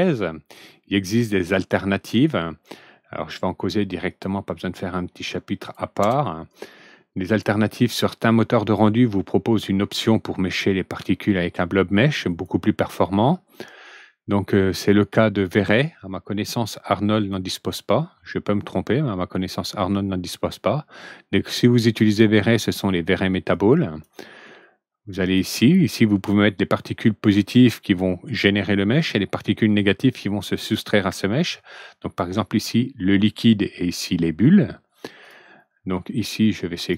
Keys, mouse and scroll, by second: 4.0 click, 5.5 click, 5.9 ctrl+d, 7.2 click, 12.2 click, 14.5 scroll down 1, 17.1 click, 22.4 click, 23.5 click, 25.2 click, 35.1 click, 36.7 click.